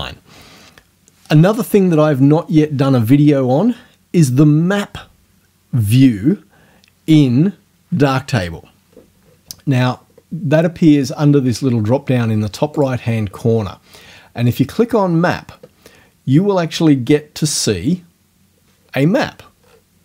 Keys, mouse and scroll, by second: 12.7 click, 14.5 click, 19.6-19.9 scroll down 1.